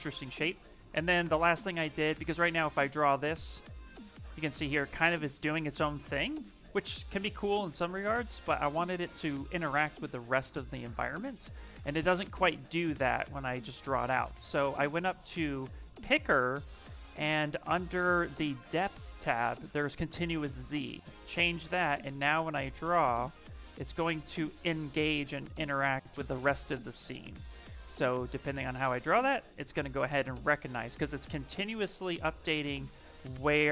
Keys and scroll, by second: 27.0 ctrl+z, 30.5 ctrl+z.